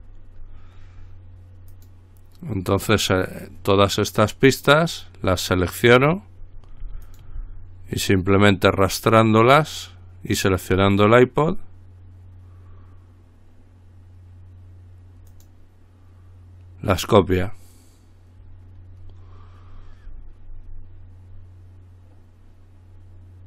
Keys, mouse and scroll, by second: 1.9 click, 5.1 click, 7.3 shift+click, 8.4-11.5 drag, 15.5 click, 19.9-20.8 scroll down 2, 20.8-21.8 scroll down 1.